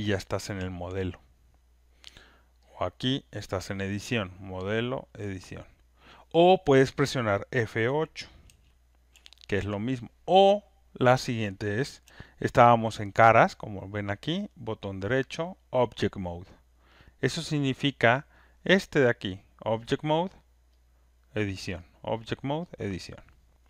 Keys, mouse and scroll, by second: 2.8 click, 4.5 click, 5.4 click, 8.4 F8, 9.2 F8, 9.5 F8, 12.0 F8, 16.9 click, 20.9 right click, 20.9 click, 22.0 click, 22.9 click.